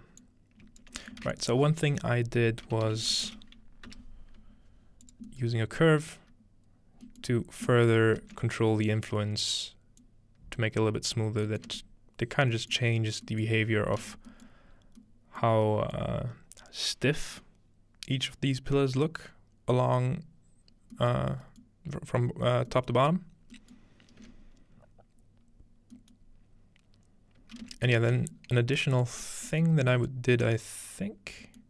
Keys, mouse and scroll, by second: 0.2 click, 1.2 shift+a, 2.7-4.4 typing, 2.9 click, 5.0-7.1 drag, 5.5-7.1 middle drag, 7.7-8.9 middle drag, 7.7-10.0 scroll up 3, 10.0 click, 11.5-12.7 middle drag, 11.7 space, 12.7-13.8 scroll up 2, 14.8-17.7 scroll up 3, 15.7 middle click, 16.2-18.3 middle drag, 20.7-21.3 scroll down 1, 21.3 middle click, 21.3-21.6 scroll up 2, 21.6-23.6 middle drag, 23.4 scroll down 1, 23.8-24.4 middle drag, 27.6 space, 28.4-29.6 scroll down 3, 29.0-31.6 ctrl+drag, 29.6-31.5 middle drag.